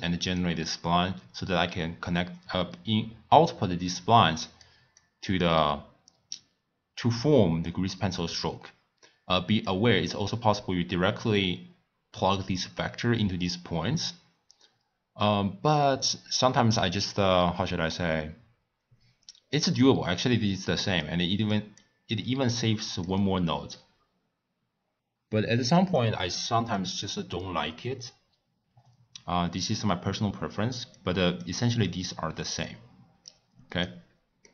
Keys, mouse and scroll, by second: 0.4 drag, 5.0 click, 9.6 click, 14.1 click, 20.6 click, 21.4 click, 21.8 click, 26.0 click, 30.9-32.0 drag, 33.2 drag, 34.4-34.5 middle drag.